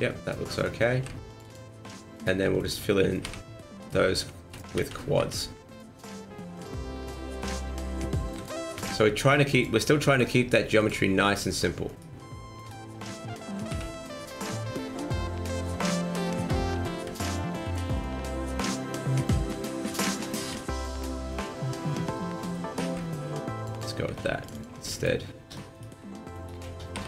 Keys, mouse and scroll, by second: 0.9 ctrl+r, 2.1 right click, 2.6 shift+right click, 3.2 f, 3.8 right click, 4.3 shift+middle click, 4.8 ctrl+z, 5.2 ctrl+z, 6.6 click, 7.3 right click, 8.3 g, 10.8 click, 11.8 right click, 12.6 shift+right click, 13.7 f, 14.2 right click, 14.8 scroll up 1, 14.8 r, 15.4 right click, 16.1 shift+right click, 16.7 ctrl+z, 16.9 ctrl+z, 17.2 ctrl+z, 17.2 r, 17.5 ctrl+z, 19.2 click, 19.9 right click, 20.2 shift+right click, 20.5 x, 22.1 middle click, 22.1 scroll down 1, 22.8 ctrl+r, 24.2 ctrl+r, 24.8 middle click, 25.7 right click, 26.3 shift+right click, 26.9 f.